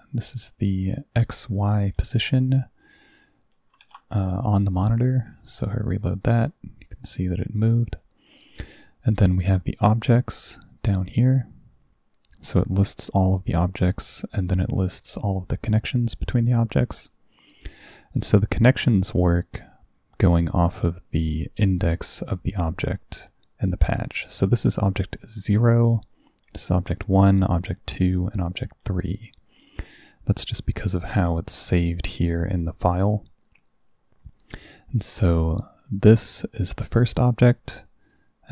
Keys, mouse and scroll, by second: 0.9 click, 1.6 click, 2.6-3.6 drag, 3.8 ctrl+s, 4.8 click, 5.7 click, 11.2-13.2 drag, 14.1 click, 15.8 click, 17.7 click, 18.6-19.4 drag, 23.3-24.4 drag, 25.9 click, 27.1 click, 28.1 click, 29.6 click, 35.6 click.